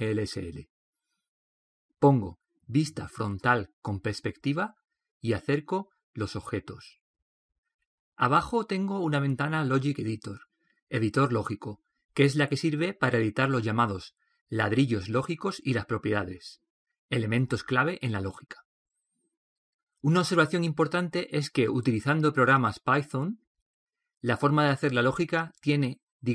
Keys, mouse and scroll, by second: 3.5 KP_1, 5.0 KP_5, 6.0-7.4 middle drag, 8.4-10.2 middle drag, 10.4 middle click, 11.4-18.8 middle drag.